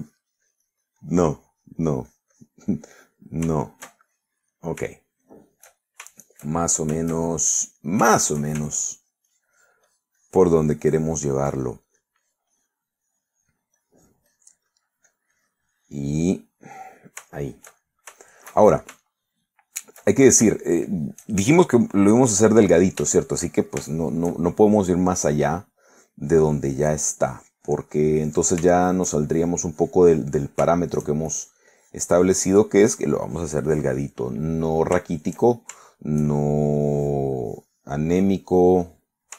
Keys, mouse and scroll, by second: 0.1-3.7 ctrl+drag, 3.8-5.5 ctrl+middle drag, 5.8-6.9 shift+middle drag, 7.1-8.8 shift+middle drag, 9.6 ctrl+shift+middle click, 10.1-12.6 ctrl+drag, 13.0 click, 16.9 click, 17.8-20.1 middle drag, 21.2-22.3 shift+middle drag, 22.8 middle click, 24.2 shift+middle click, 25.0 shift+middle click, 26.0-28.0 drag, 29.7 shift+click, 29.8 shift+middle click, 30.3-31.8 shift+drag, 31.8 shift+middle click, 32.4-33.9 shift+drag, 34.3 click, 35.2 middle click, 36.2-37.3 shift+middle drag, 37.9 click, 38.5 click.